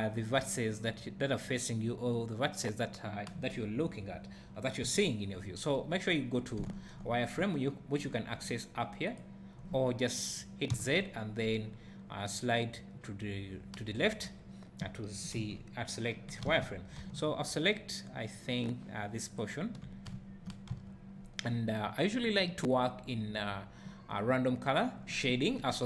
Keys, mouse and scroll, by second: 4.8 KP_1, 9.0 click, 10.7 z, 15.3 KP_1, 16.4 alt+a, 17.0 b, 20.1 `, 20.7 z.